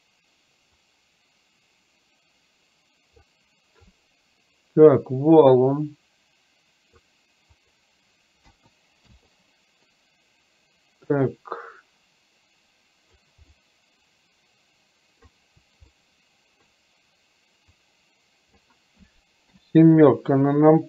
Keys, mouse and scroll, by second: 0.9-3.3 drag, 5.5-6.9 drag, 7.8-9.2 drag, 11.2-13.3 drag, 13.5-15.3 middle drag, 16.0-16.7 middle drag, 17.8-18.7 drag.